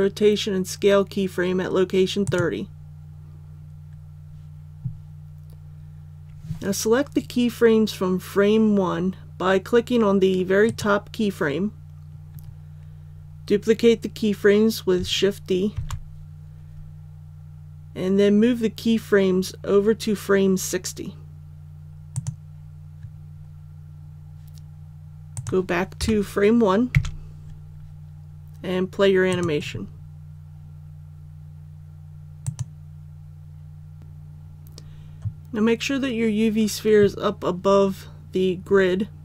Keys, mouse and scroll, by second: 2.2-3.3 drag, 10.6 right click, 15.7 shift+d, 22.1 click, 26.0 KP_1, 29.3 click.